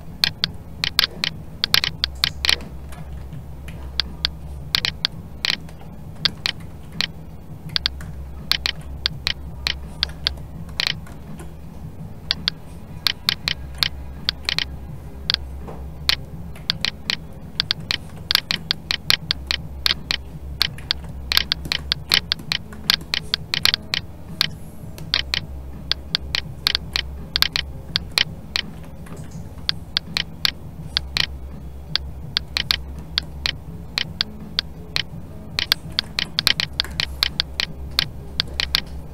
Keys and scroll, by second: 2.9 ctrl+z, 10.1 ctrl+z, 20.8 ctrl+z, 29.0 ctrl+z.